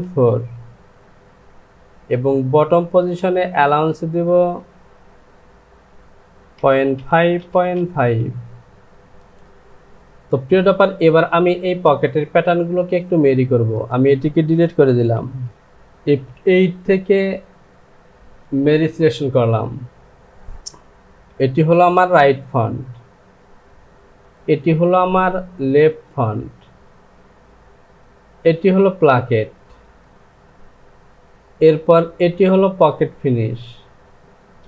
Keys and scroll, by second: 6.5 KP_Decimal, 7.0 KP_5, 7.1 Down, 9.4 j, 15.5 s, 34.2 Home.